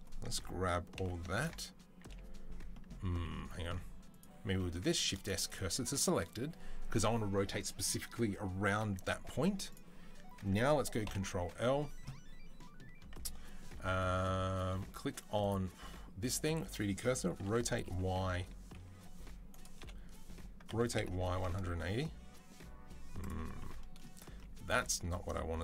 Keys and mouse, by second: 0.8 ctrl+l, 3.3 2, 4.8 shift+s, 10.9 ctrl+l, 13.9-15.2 middle drag, 15.2-23.2 drag, 17.3 r, 19.6 o, 20.5 r, 23.2-25.6 middle drag.